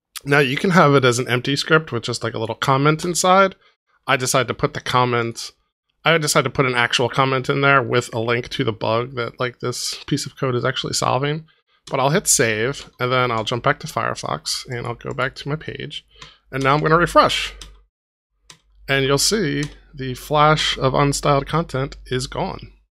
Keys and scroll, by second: 3.0 BackSpace, 4.0 super+BackSpace, 4.1 super+z, 11.8 super+s, 12.8 super+Tab, 16.6 super+r.